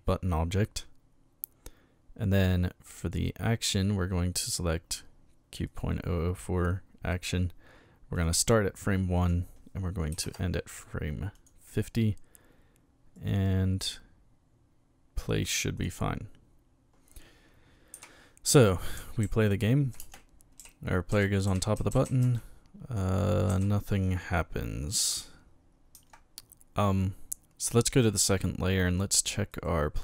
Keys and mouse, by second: 3.0 click, 5.7 click, 8.2 click, 9.2 click, 10.1 KP_5, 11.3 click, 13.2 click, 15.8 click, 17.9-23.5 typing, 25.9 Escape, 27.9 click, 29.5 right click.